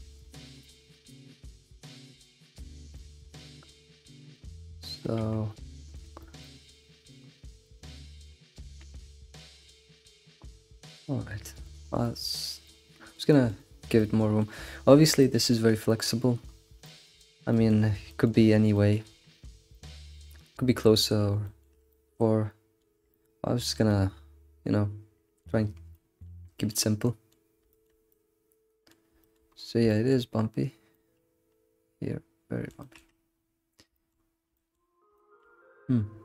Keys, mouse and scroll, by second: 0.3 click, 0.6 g, 3.0 shift+middle click, 3.5 click, 4.0 scroll down 2, 4.3 alt+middle click, 5.2 g, 6.2 shift+middle click, 6.6 middle click, 7.2 scroll up 3, 7.6 click, 8.8 g, 11.9 scroll down 2, 12.0 middle click, 12.8 g, 12.9-14.8 middle drag, 14.8-15.2 scroll down 1, 15.2-16.3 shift+middle drag, 16.3-16.8 scroll down 4, 16.8-18.4 shift+middle drag, 18.4-18.7 scroll up 2, 18.7-25.7 shift+middle drag, 25.7 scroll down 2, 25.9-29.5 shift+middle drag, 29.5-29.9 scroll up 4, 29.9-33.0 shift+middle drag, 33.0-33.6 scroll up 5, 33.9 shift+middle drag, 34.1-35.1 scroll up 5, 34.5 shift+middle drag, 35.1 shift+middle click, 36.1-36.2 scroll down 3.